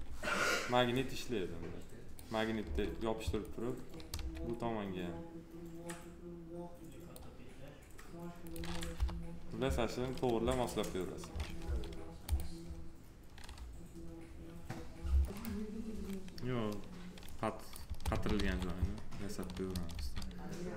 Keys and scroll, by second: 2.5 s, 4.0 s, 8.8 p, 18.2 ctrl+z, 19.7 s.